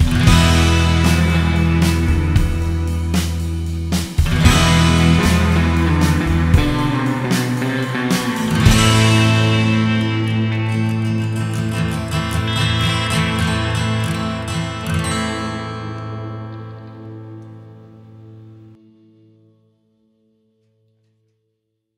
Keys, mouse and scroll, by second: 0.0 shift+d, 5.2 click, 11.8 click, 13.6 click, 15.6 click, 17.5 shift+d.